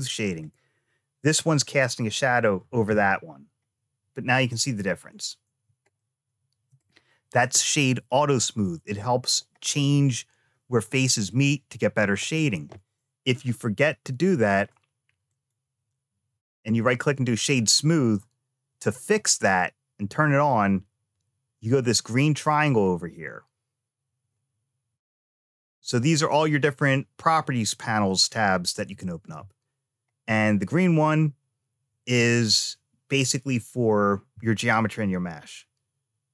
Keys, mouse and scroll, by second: 0.1 click, 2.5 g, 5.8 shift+middle click, 11.1 click, 12.1 click, 13.5-14.5 shift+middle drag, 15.1-17.3 right drag, 22.5 click, 25.0 click.